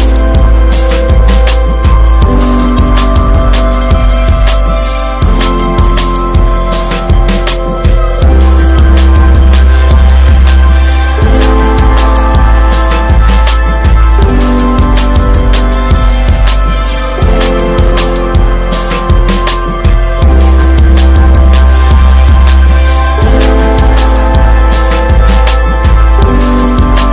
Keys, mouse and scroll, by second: 4.3 click, 5.2 ctrl+s, 6.0-9.7 middle drag, 9.7 click, 10.4 middle drag, 10.6 scroll down 6, 10.9-11.9 shift+middle drag, 11.9 click, 12.1 Tab, 12.2-13.1 scroll up 3, 12.5 middle click, 12.9 shift+middle click, 13.4 click, 13.6-13.9 scroll up 2, 13.9 shift+middle click, 14.9 i, 16.5 alt+middle click, 16.8 alt+z, 17.1 shift+middle click, 17.4 scroll up 2, 17.7-18.9 shift+middle drag, 18.9 e, 20.6 middle click, 20.9 alt+z, 21.2 shift+middle click, 21.4-22.0 scroll up 1, 22.0 x, 22.5 middle click, 23.1 Tab, 23.2 scroll up 2, 23.9 ctrl+r, 24.9 ctrl+r, 25.4-26.6 middle drag, 26.6 click.